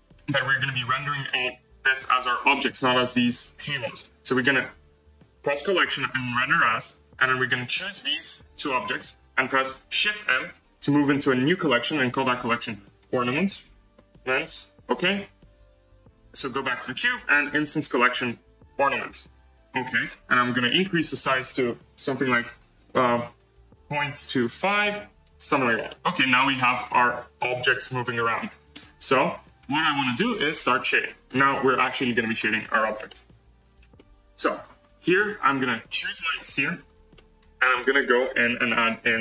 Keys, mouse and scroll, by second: 2.2-3.7 scroll down 5, 5.7-7.4 drag, 8.2 shift+click, 8.6-14.5 middle drag, 16.3 click, 18.9 click, 19.6-20.4 scroll up 4, 20.4-21.4 scroll down 3, 24.4-25.4 drag, 25.4-25.8 scroll down 3, 25.8-26.4 middle drag, 26.4 scroll up 2, 26.7 space, 27.3-27.8 scroll down 1, 27.8 scroll down 2, 28.2 space, 28.5 scroll up 1, 28.7-29.0 middle drag, 29.0 space, 29.5-30.0 scroll up 7, 30.0 click, 30.4 scroll down 1, 30.7-31.2 drag, 31.2-31.8 scroll down 1, 31.8-32.3 scroll down 5, 32.3 space, 32.5-33.0 scroll up 6, 33.0 middle click, 33.5-33.9 scroll down 1, 33.9 middle click, 34.7-35.3 scroll up 3, 36.1-39.2 drag.